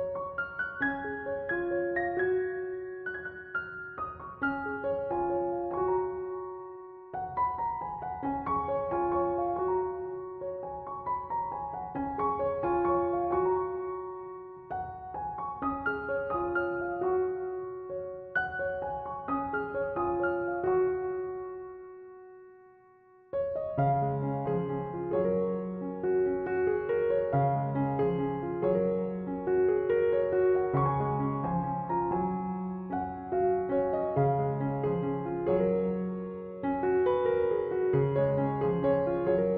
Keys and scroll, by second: 10.8 typing.